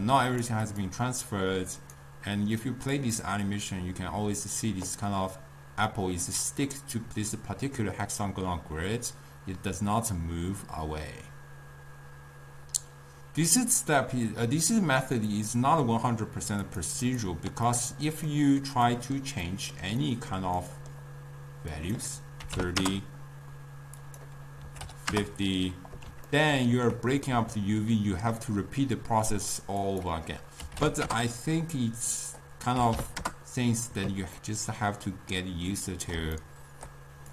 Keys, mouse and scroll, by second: 0.0 click, 0.5 click, 0.9 click, 2.1-6.2 drag, 15.5-16.9 drag, 22.9-26.4 drag, 26.4-31.2 ctrl+middle drag, 31.2-34.5 drag, 34.5-37.3 ctrl+middle drag.